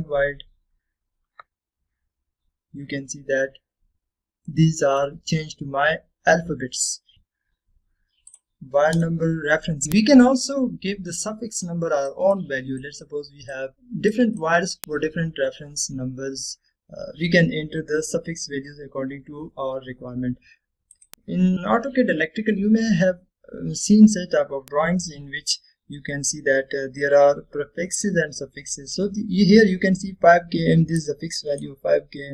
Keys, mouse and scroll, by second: 2.3 scroll up 1, 4.4 scroll down 1, 5.6-6.2 middle click, 6.5 scroll up 1, 7.1 right click, 7.3 click, 7.4 click, 12.4-12.9 drag, 12.7 typing, 21.8 click, 22.0 typing, 24.1 typing, 25.4 scroll down 1, 25.9 scroll up 1, 27.0-28.0 scroll down 1, 28.0-28.7 scroll down 1, 28.7-29.7 scroll down 1, 30.0 typing, 32.1-32.3 drag.